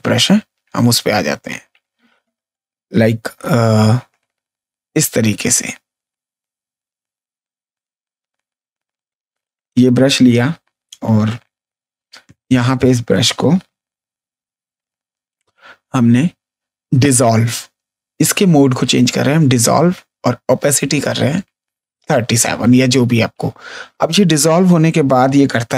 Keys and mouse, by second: 0.6 click, 3.7 click, 5.2 click, 8.9 click, 14.7 space, 15.5 ctrl+click, 16.0 ctrl+click, 18.1 click, 22.5 space, 22.8 ctrl+click, 23.6 click.